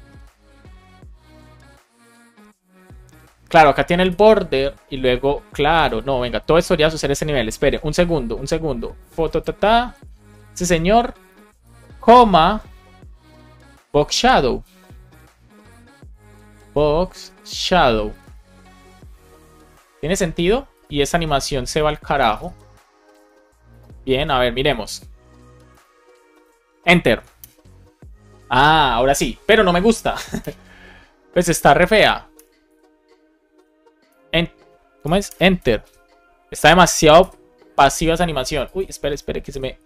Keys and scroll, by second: 9.8 shift+super+Right, 10.1 super+c, 10.3 Left, 11.3 super+Right, 11.5 BackSpace, 12.4 Return, 12.6 super+v, 16.2 shift+b, 17.1 shift+s, 18.6 super+s, 19.6 alt+shift+f, 20.0 super+s, 21.4 super+Right, 21.7 shift+super+Left, 22.1 BackSpace, 22.4 super+s, 23.1 super+s, 27.3 Return, 30.3 Return, 32.3 Return, 32.6 Escape, 33.5 Return, 34.9 BackSpace, 35.3 Return, 35.8 ctrl+alt+6, 37.1 ctrl+alt+5, 37.2 ctrl+alt+6, 39.4 ctrl+alt+5.